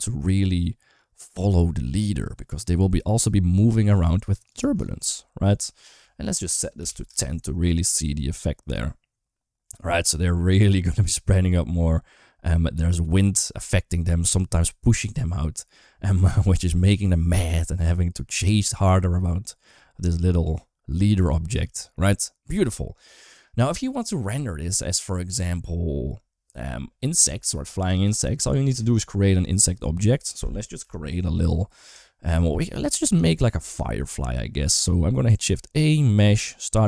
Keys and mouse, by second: 4.3-6.9 drag, 22.3 space, 30.6 KP_7, 31.9 shift+middle click, 33.1 shift+middle click, 33.8 shift+a.